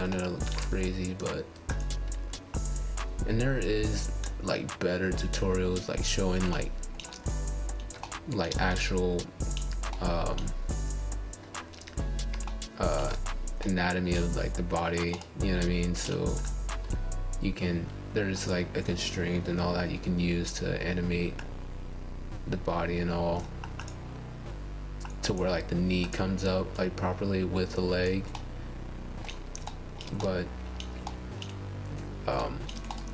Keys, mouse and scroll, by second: 0.2 click, 0.9 click, 2.0 click, 2.3 middle click, 2.6 scroll down 2, 2.8 click, 4.7-6.2 middle drag, 6.2 scroll down 1, 6.4 click, 7.2 click, 7.9-8.9 middle drag, 8.9-10.4 scroll down 4, 9.2 shift+middle click, 10.6-11.9 middle drag, 11.9 click, 12.1-13.6 middle drag, 13.9-14.9 middle drag, 14.9 scroll down 2, 15.2-15.8 shift+middle drag, 15.8 scroll down 1, 15.9-16.3 scroll up 7, 16.3-17.8 middle drag, 19.2-20.6 scroll down 12, 19.5 middle drag, 20.6 click, 21.0 click, 21.2 click, 21.9 scroll up 4, 22.4 click, 24.1 scroll up 4, 27.0 click, 27.4 click, 28.9 click, 29.7 middle click, 30.4 click, 30.9 g, 31.3 click, 31.7 click, 31.9 middle click, 32.8 scroll down 1, 32.9-33.1 scroll up 9.